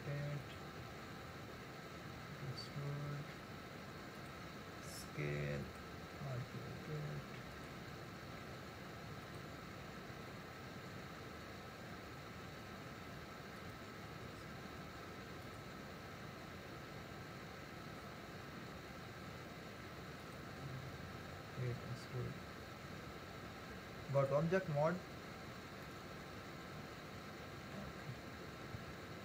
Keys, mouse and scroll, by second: 0.9 e, 4.8 s, 6.4 r, 8.5 e, 10.8 r, 14.2 s, 21.6-23.4 scroll down 2, 23.4 Tab, 24.8-25.3 scroll down 1, 25.3-25.9 scroll up 1, 25.9-28.1 middle drag, 28.1-28.8 scroll up 1, 28.8 Tab.